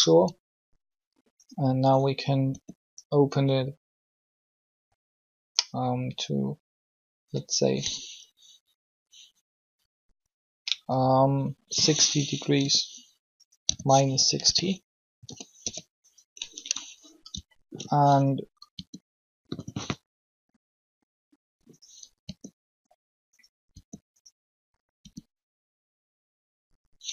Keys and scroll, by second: 2.4 r, 11.5 6, 12.5 0, 13.6-15.6 typing, 18.7 alt+shift+r, 22.2 r, 23.8 r, 25.1 r.